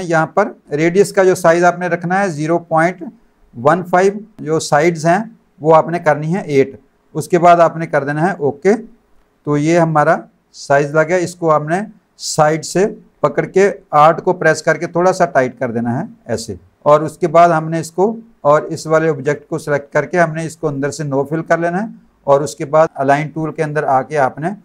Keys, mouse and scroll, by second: 8.2 click, 10.8 click, 14.6 alt+click, 16.7 click, 17.4 click, 18.9 shift+click, 20.6 click, 21.2 click, 23.4 click.